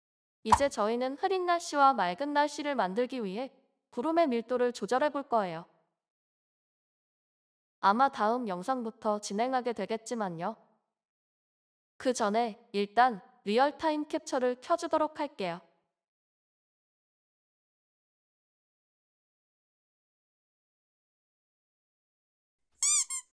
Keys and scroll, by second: 0.0-2.1 typing, 3.6-4.4 typing, 7.4-8.2 typing, 9.6 ctrl+s, 11.0-11.7 typing.